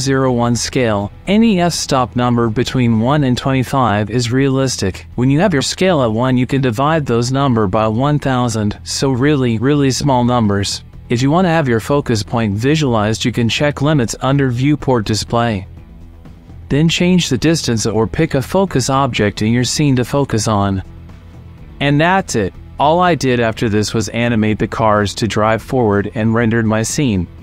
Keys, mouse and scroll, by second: 0.4-2.6 drag, 3.2 click, 5.9 click, 9.0 click, 9.4 shift+middle click, 10.0 shift+middle click, 13.2 click, 15.3 middle click, 16.8-19.7 drag, 20.3 click, 20.5 click, 20.6 shift+middle click, 21.0-22.1 middle drag, 22.2 shift+middle click, 22.7 click, 24.5 click, 26.6 t.